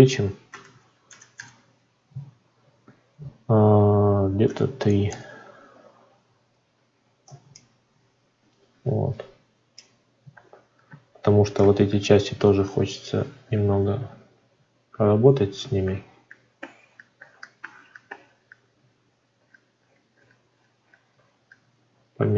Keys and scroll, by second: 5.0 Return, 7.2 ctrl+r.